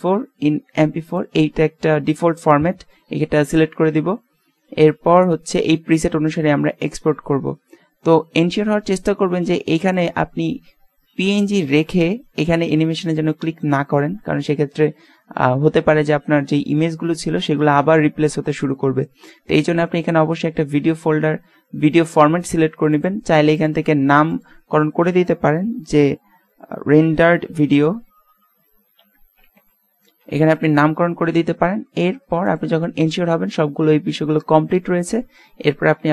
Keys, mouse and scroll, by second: 5.8-9.9 middle drag, 9.9-11.6 drag, 22.9-24.6 drag.